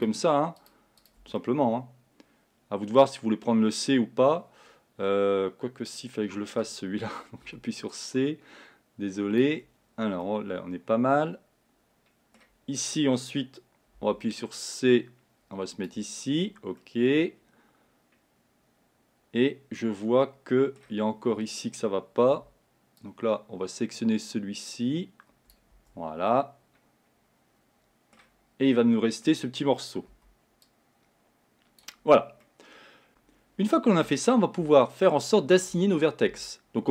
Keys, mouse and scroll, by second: 0.1 shift+click, 0.7 shift+click, 1.1 shift+click, 1.5-4.5 middle drag, 7.8 c, 10.4-12.5 middle drag, 12.5-14.3 scroll up 1, 14.3 c, 16.9-19.9 middle drag, 26.4-30.3 middle drag, 30.3 c, 32.5 middle click, 33.1-34.3 scroll down 1, 34.3-36.9 shift+middle drag.